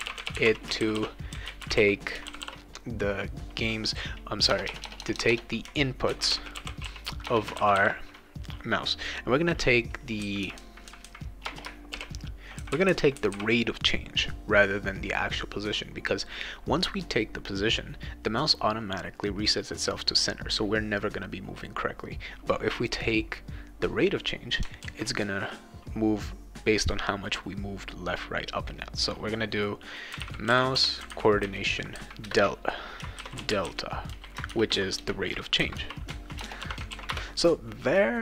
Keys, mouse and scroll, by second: 0.0-2.3 typing, 4.5-7.6 typing, 11.4 BackSpace, 11.9 shift+i, 24.8 ctrl+s, 29.8-36.6 typing, 32.3 Return, 36.9 ctrl+s, 37.1 Return.